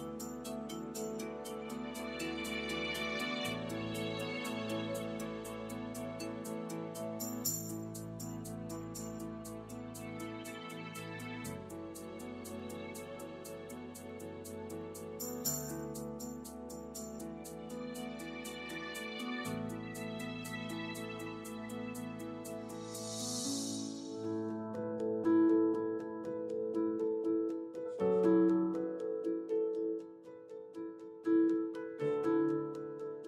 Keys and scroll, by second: 21.0 i.